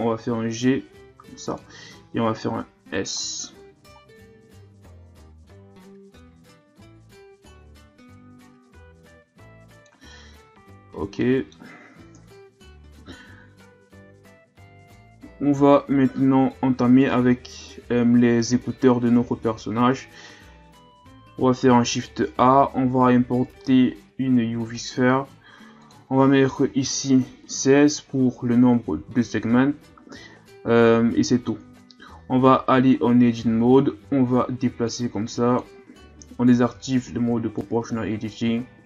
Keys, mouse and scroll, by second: 1.9 s, 10.1 Tab, 10.5 a, 10.7-11.2 scroll down 4, 11.2-12.1 middle drag, 12.1 KP_1, 13.7-14.5 scroll down 3, 14.5-15.0 scroll up 5, 16.2 scroll up 2, 21.6 shift+a, 25.8-28.8 drag, 32.4 Tab, 32.7-33.5 scroll down 5, 33.5-33.8 scroll down 2, 33.8-34.8 scroll up 5, 34.8-36.7 drag, 36.7 o, 37.6-38.6 drag, 38.6-38.8 scroll up 7.